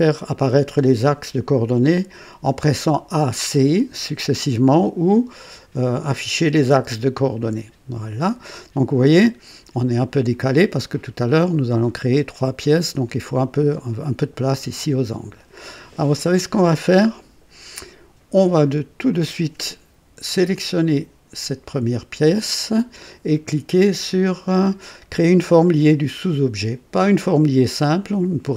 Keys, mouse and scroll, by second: 4.8 click, 6.3-7.1 typing, 7.4 click, 8.2-10.1 drag, 10.4-12.0 drag, 10.5-11.2 typing, 13.0 click, 14.7-15.6 drag, 19.1 click, 20.5-21.7 drag.